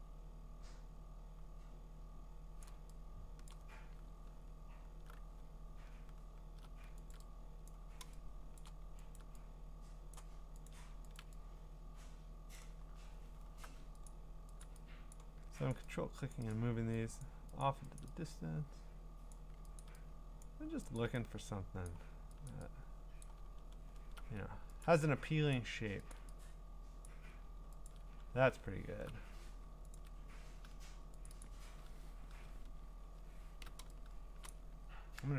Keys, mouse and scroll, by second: 2.6-3.4 click, 3.3 click, 3.5 click, 4.2 scroll, 4.9 scroll, 5.5-6.1 scroll, 7.1 ctrl+click, 7.7 click, 8.6 click, 9.2 ctrl+click, 9.3 ctrl+click, 10.1 click, 10.7 ctrl+click, 11.2 ctrl+click, 12.5 click, 12.9-13.5 scroll, 14.1 ctrl+click, 14.6 ctrl+click, 15.1 click, 15.7 ctrl+click, 16.4 click, 16.6 click, 17.1 ctrl+click, 17.3 click, 17.6 click, 18.0 ctrl+click, 18.2 ctrl+click, 19.3 click, 19.8 ctrl+click, 20.4 click, 21.0 ctrl+click, 21.9 click, 22.5 ctrl+click, 23.2 click, 23.5-24.0 scroll down 8, 24.8 ctrl+click, 25.6 click, 26.1 ctrl+click, 27.1 click, 27.9 ctrl+click, 28.2-30.0 scroll, 30.0 ctrl+click, 31.3 click, 31.4 click, 31.5 ctrl+click, 32.6 scroll, 33.4 scroll, 34.5 click.